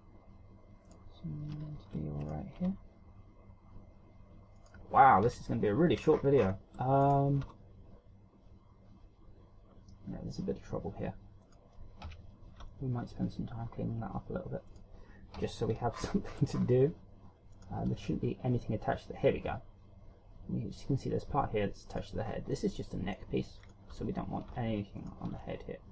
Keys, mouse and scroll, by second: 1.5 right click, 2.4-2.8 shift+scroll down 4, 2.8 right click, 3.2 r, 5.8 KP_1, 6.8-7.2 shift+scroll up 8, 7.6 right click, 8.0 r, 12.1 right click, 12.6 KP_3, 13.2 r, 15.4 right click, 15.9 KP_1, 16.5-17.3 shift+scroll up 10, 18.1 right click, 18.5 r, 22.5 right click, 22.8 scroll up 2, 23.1 middle click, 24.2 right click, 24.7 Tab, 25.1 Tab, 25.5 right click.